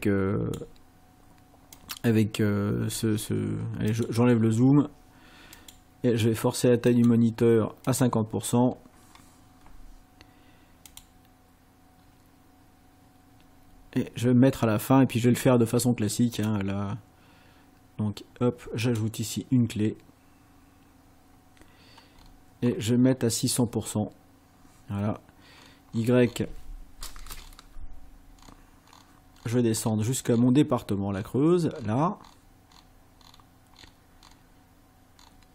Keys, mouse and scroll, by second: 1.8 click, 3.9 click, 5.6 click, 6.9 click, 7.8 click, 10.9 click, 16.4 click, 18.9 click, 22.2-23.3 scroll up 4, 25.6 scroll down 2, 27.4 ctrl+scroll down 2, 28.3-28.6 ctrl+scroll down 2, 28.8-29.2 ctrl+scroll down 2, 29.4-30.6 ctrl+scroll down 6, 31.2 ctrl+scroll down 2, 31.8-33.5 ctrl+scroll down 8, 33.8-34.6 ctrl+scroll down 4, 35.2-35.5 ctrl+scroll down 6.